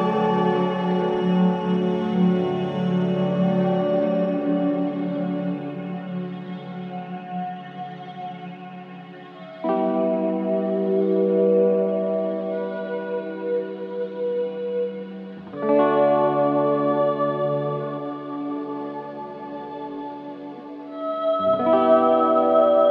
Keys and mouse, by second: 0.7 click, 1.0-2.6 typing, 1.2 click, 3.4-4.4 drag, 4.6-14.3 typing, 4.6 click, 6.7 click, 9.0 click, 10.7 click, 18.4 click, 19.3 ctrl+alt+click, 20.1 click, 21.5-22.9 drag.